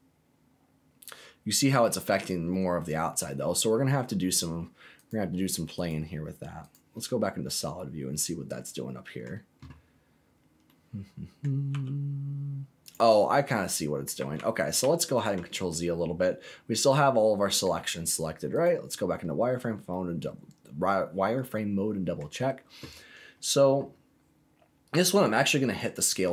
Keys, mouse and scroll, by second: 1.6 click, 2.1 scroll down 1, 2.5 middle click, 3.2 scroll down 1, 4.9 click, 5.7 click, 6.7 click, 7.1-7.4 scroll down 2, 7.4-9.2 middle drag, 9.7-10.2 scroll up 2, 10.3 scroll down 2, 10.6 middle click, 11.7 s, 12.8 click, 13.1 middle click, 14.3 ctrl+z, 14.8 ctrl+z, 15.7-17.6 middle drag, 18.6 click, 19.3-19.9 scroll up 2, 19.9-22.1 middle drag, 25.7 click.